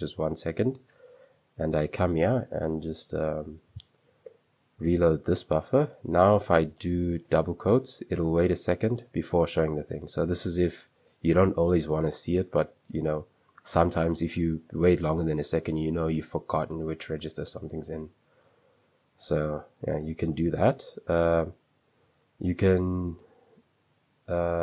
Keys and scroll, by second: 1.0 super+3, 4.3 space, 4.3 shift+r, 5.7-7.3 typing, 18.1 Escape, 19.2 super+2, 20.3-22.2 typing, 23.4 typing.